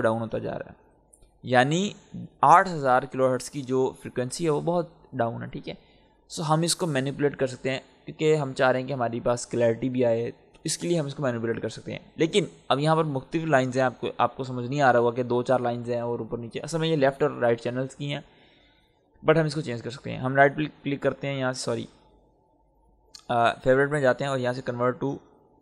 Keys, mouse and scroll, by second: 6.3-8.1 scroll down 1, 8.8-10.3 scroll down 1, 14.3-14.6 scroll up 1, 19.9 right click, 20.6 click, 25.3 click.